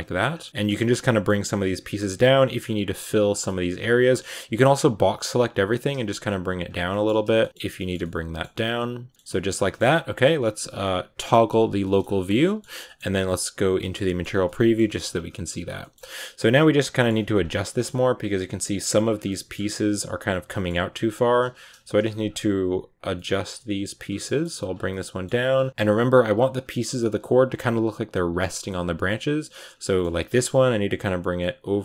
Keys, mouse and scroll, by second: 0.2 scroll down 1, 0.3 middle click, 0.5 g, 0.8 middle click, 1.6 right click, 1.7 scroll down 3, 2.0 g, 2.4 middle click, 2.4-3.1 scroll up 1, 3.1 shift+right click, 3.6 r, 3.6 g, 5.3 b, 5.6 g, 6.7 scroll down 1, 6.7 middle click, 6.9 a, 7.2 shift+middle click, 7.5 scroll down 2, 7.6 shift+middle click, 7.8 scroll up 1, 7.9 middle click, 8.8 right click, 9.0 middle click, 9.7 g, 11.4 /, 11.7 middle click, 11.9-12.2 scroll down 3, 12.0 shift+middle click, 12.3 middle click, 12.5 a, 12.7 middle click, 13.7 z, 13.9 middle click, 14.1 scroll up 1, 14.3 middle click, 14.6 scroll down 1, 14.8 shift+middle click, 14.9-15.3 scroll up 2, 15.4 right click, 15.6 middle click, 15.8 scroll up 2, 16.0 r, 16.4 middle click, 17.0 g, 17.5 middle click, 18.2 right click, 18.4 r, 18.7 g, 19.1 middle click, 19.4-20.4 scroll up 2, 20.4 middle click, 20.7-22.0 typing, 22.8 right click, 23.0 middle click, 23.7-27.0 typing, 24.1 middle click, 24.3 scroll up 1, 24.7 middle click, 25.6 middle click, 25.7-26.2 scroll up 1, 26.6 middle click, 28.1 scroll down 2, 28.3-29.4 shift+middle drag, 29.4 right click, 29.6 scroll up 1, 29.7 shift+middle click, 30.1 scroll up 2, 30.4 g.